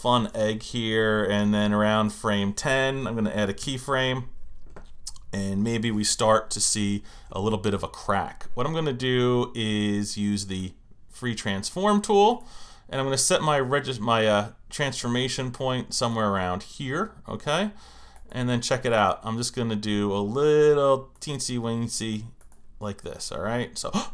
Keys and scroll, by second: 3.6 F6.